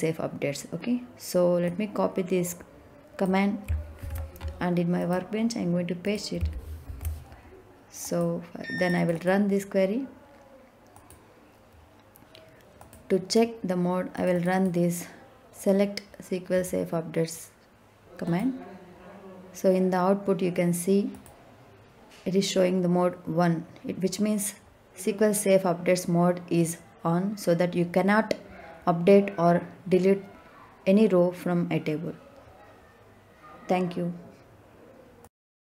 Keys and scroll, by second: 3.9 ctrl+c, 6.8 ctrl+v.